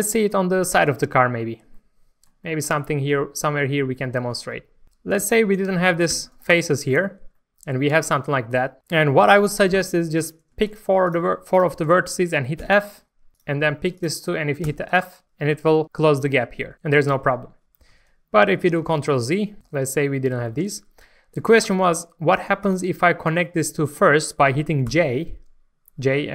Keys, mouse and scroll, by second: 0.0 shift+middle click, 1.3 scroll up 1, 1.7 shift+middle click, 2.4 shift+middle click, 3.9 shift+middle click, 4.8 click, 5.2 shift+click, 6.1 shift+click, 6.5 click, 7.0 scroll up 1, 7.3 shift+middle click, 10.2 click, 10.7 shift+click, 11.5 shift+click, 12.6 shift+f, 13.3 click, 13.9 shift+click, 14.6 shift+f, 17.9 ctrl+x, 18.7 ctrl+z, 18.8 ctrl+z, 19.6 ctrl+z, 20.4 alt+a, 21.6 click, 22.6 shift+click, 24.8 j.